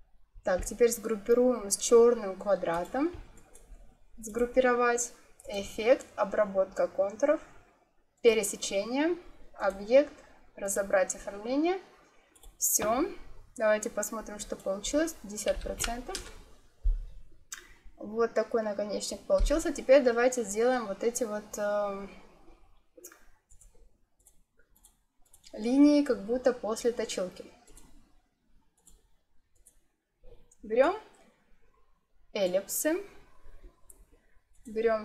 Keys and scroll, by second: 15.4 5, 15.5 0, 16.0 Return.